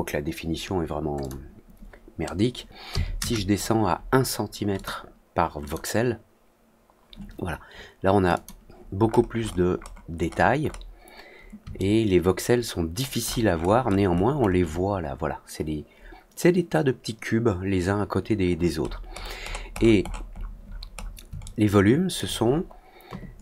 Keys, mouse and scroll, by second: 1.1 click, 4.7 click, 5.6 click, 8.3 click, 9.0-9.4 scroll up 2, 9.4 middle click, 9.7 middle click, 10.1 middle click, 10.5 middle click, 11.7-12.9 alt+middle drag, 13.1-13.9 alt+scroll up 3, 14.0 alt+middle click, 14.3 alt+middle click, 18.4 middle click, 18.7 middle click, 19.0 middle click, 19.4 middle click, 19.6 middle click, 19.9-20.5 scroll down 4, 20.6 scroll up 2, 20.9 scroll down 2, 21.4-22.1 alt+middle drag.